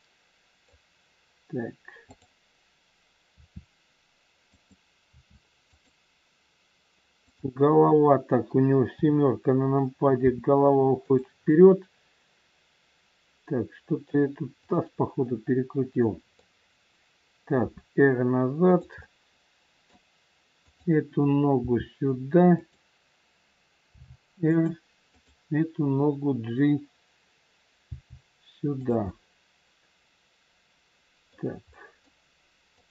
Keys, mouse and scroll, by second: 2.0 click, 3.3 r, 5.0 r, 7.2 click, 8.9 KP_7, 10.2 r, 11.5 middle click, 14.6 click, 15.3 middle click, 17.6 r, 19.0 middle click, 20.6 click, 21.5 g, 24.0 r, 25.1 click, 27.9 g, 29.0 middle click, 29.0 scroll up 1, 32.0 middle click, 32.6 click.